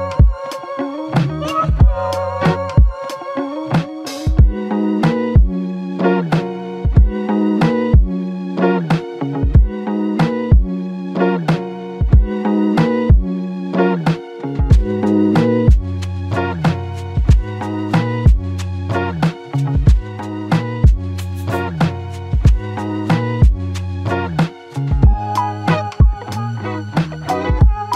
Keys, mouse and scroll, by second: 20.1 right click.